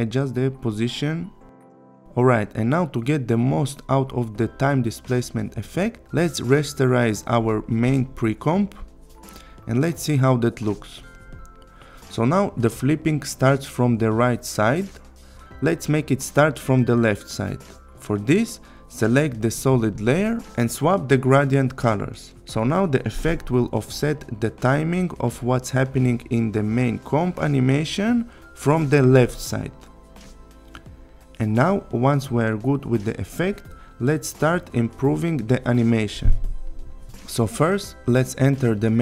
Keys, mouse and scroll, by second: 0.7 click, 3.2-6.1 click, 8.5 click, 9.7 click, 11.7-13.1 click, 13.6 click, 14.1 click, 17.3 click, 19.9 click, 24.8-25.6 click, 27.2-27.5 click, 27.8-28.1 click, 30.3-30.6 click.